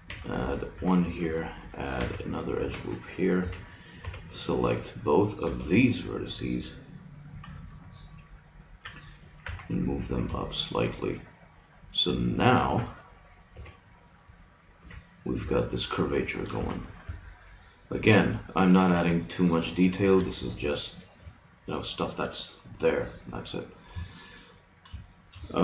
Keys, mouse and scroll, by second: 0.0 ctrl+r, 2.0 ctrl+r, 3.4 a, 4.0 b, 5.4 b, 7.6-8.8 middle drag, 9.4 g, 12.6 a, 13.5 b, 14.8 g, 16.6 a, 17.4 click, 21.0-22.2 middle drag, 25.0-25.6 middle drag.